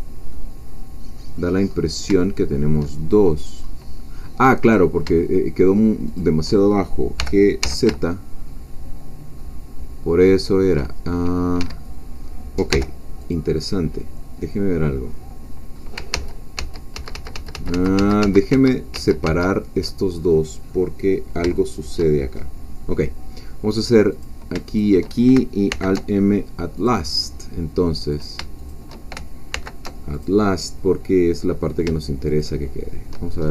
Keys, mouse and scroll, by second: 0.3-1.7 middle drag, 1.7-2.1 scroll up 1, 2.2 shift+middle click, 3.0-3.4 shift+scroll up 1, 3.8 scroll down 2, 4.7 click, 6.0 shift+click, 7.2 g, 7.6 z, 11.6 Escape, 12.7 g, 13.2 click, 14.2-15.9 middle drag, 16.1 ctrl+z, 20.2 ctrl+scroll down 2, 20.7-22.2 middle drag, 22.2-22.6 shift+scroll up 1, 22.8 scroll down 1, 24.2 click, 24.7 shift+click, 25.7 alt+m, 26.8-28.4 drag, 28.7 shift+click, 29.5 alt+m, 30.1 alt+click, 31.0 middle click, 31.0-31.8 scroll down 1, 32.3 shift+click, 33.4-33.5 shift+scroll up 3.